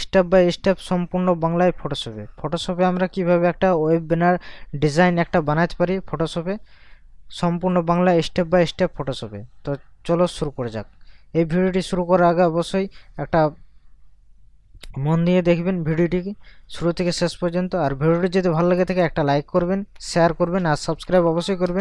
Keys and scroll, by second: 21.4 ctrl+KP_Add.